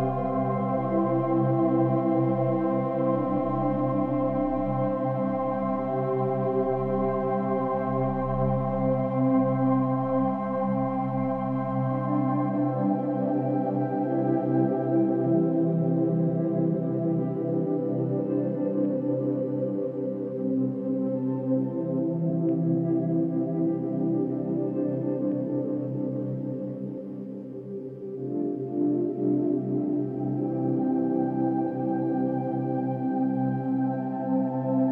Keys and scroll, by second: 0.0 space, 6.7 ctrl+-, 6.9 ctrl+=, 10.1 ctrl+d, 11.6 ctrl+d, 12.5 space, 20.4 space, 21.7 ctrl+-, 25.0 space.